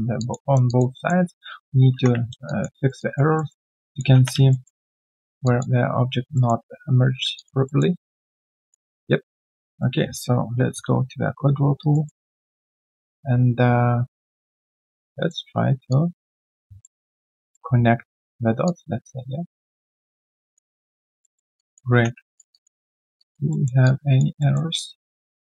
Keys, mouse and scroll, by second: 0.2 alt+click, 0.4 alt+right click, 0.6 alt+click, 0.9 alt+middle click, 2.4 alt+click, 2.8 alt+right click, 3.0 alt+click, 3.3 alt+middle click, 3.6 alt+right click, 3.8 alt+click, 4.1 3, 4.5 alt+middle click, 5.4 alt+click, 6.3 alt+middle click, 7.3 typing, 7.3 alt+click, 7.6 alt+middle click, 7.9 alt+right click, 8.5 alt+click, 8.9 alt+right click, 9.5 right click, 10.5 ctrl+shift+q, 11.8 alt+right click, 12.0 alt+middle click, 16.8 alt+middle click, 19.8 alt+right click, 20.1 alt+click, 20.8 alt+middle click, 21.5 alt+click, 21.9 3, 22.3 alt+right click, 22.5 alt+click, 22.8 alt+middle click, 23.2 alt+click, 23.5 alt+middle click, 23.8 alt+click, 24.4 alt+middle click, 24.7 alt+click.